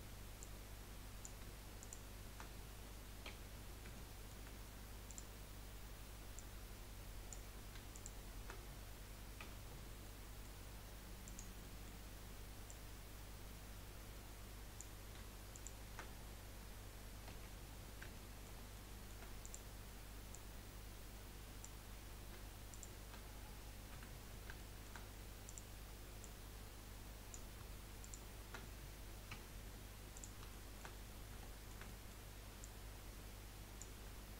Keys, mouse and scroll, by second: 0.4 click, 1.8 shift+click, 3.2 j, 3.9-5.0 shift+middle drag, 5.0 click, 6.3 click, 7.9 shift+click, 9.4 j, 10.0-11.2 middle drag, 11.2 click, 11.6-12.7 middle drag, 12.7 click, 15.5 shift+click, 17.3 j, 17.7-18.1 scroll down 2, 18.1-19.4 shift+middle drag, 19.4 click, 20.3 click, 22.7 shift+click, 24.5 shift+middle click, 25.4 click, 26.2 click, 28.0 shift+click, 29.3 j, 30.1 click, 30.5 shift+middle click, 31.0-31.4 scroll up 1, 31.4-32.6 shift+middle drag, 32.6 click.